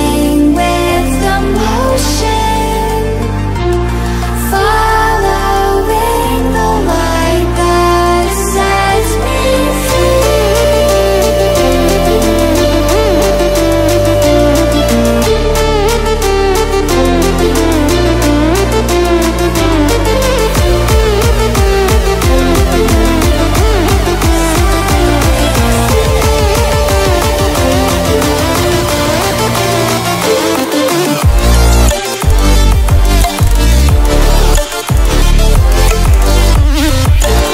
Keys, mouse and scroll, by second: 0.5-2.0 drag, 7.9 Caps_Lock, 8.2-11.2 typing, 13.3-15.1 typing, 16.8-18.3 drag, 19.9 shift+Left, 21.9 click, 27.9 shift+click, 29.0 click, 30.4-37.2 shift+drag.